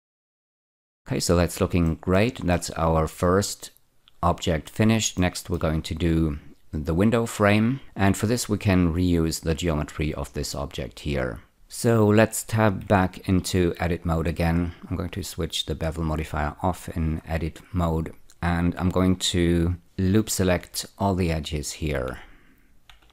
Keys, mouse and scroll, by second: 0.8-1.4 scroll down 3, 1.9-4.8 shift+middle drag, 5.2 shift+middle click, 13.5 Tab, 14.3 scroll up 1, 17.2-17.9 scroll up 1, 20.9 ä, 22.4-23.1 typing.